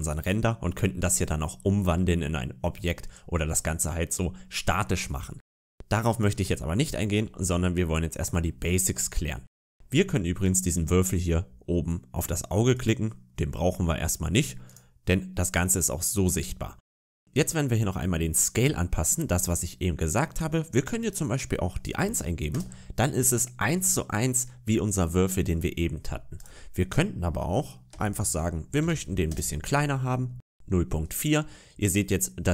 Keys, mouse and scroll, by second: 5.0 scroll up 2, 6.0 click, 6.4-6.8 scroll down 4, 6.8 middle click, 7.1-7.8 scroll up 3, 7.8 shift+middle click, 8.5 middle click, 10.3 right click, 12.6 click, 14.5 right click, 16.5-17.2 scroll down 10, 20.9 click, 26.2 click, 31.3 middle click.